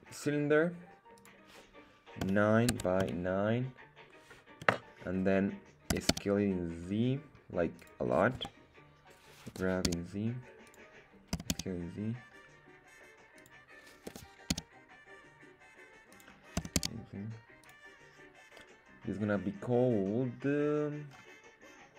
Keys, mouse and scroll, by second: 1.1-5.1 drag, 5.8 s, 6.0 z, 7.7 click, 8.3 KP_1, 9.4 g, 9.8 z, 10.6 click, 11.3 s, 11.5 z, 13.3 click, 14.0 g, 14.4 z, 16.0 click, 16.5 s, 16.7 z, 17.6 click, 20.6-21.0 scroll down 2, 21.0-21.9 scroll up 2.